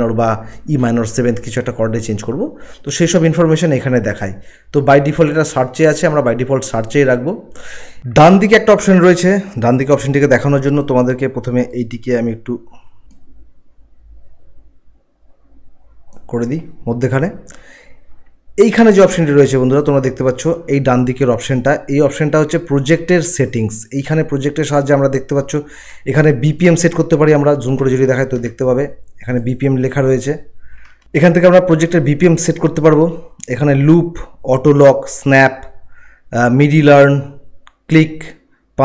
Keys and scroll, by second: 13.0 ctrl+z, 27.7 ctrl+1.